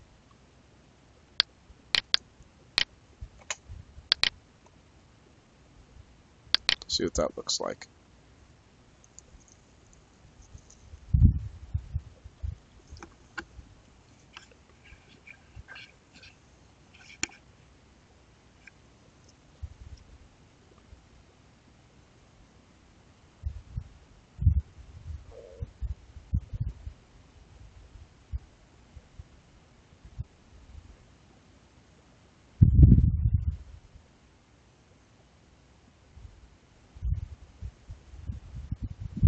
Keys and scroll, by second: 3.3 space, 4.5 space.